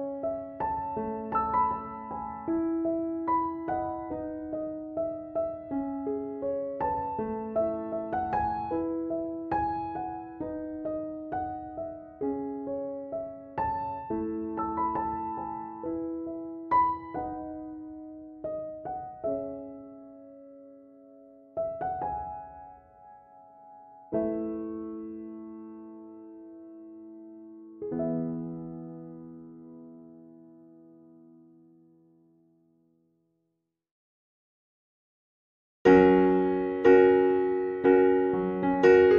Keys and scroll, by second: 37.9 Escape.